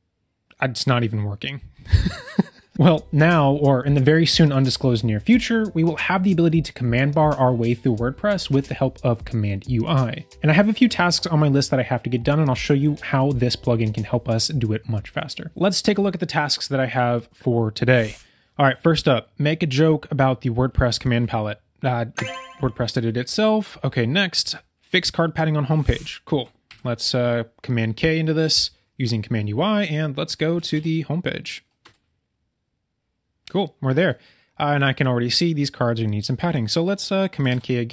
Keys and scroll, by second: 26.6 super+k, 37.5 super+k.